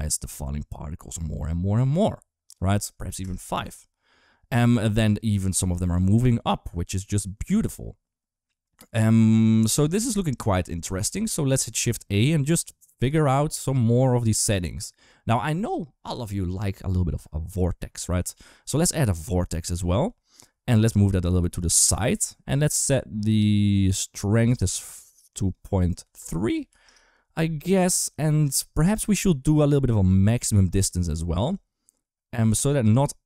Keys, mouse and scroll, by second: 2.3 click, 10.6 shift+a, 19.7 g, 25.3 click, 30.2 click, 31.3 shift+click.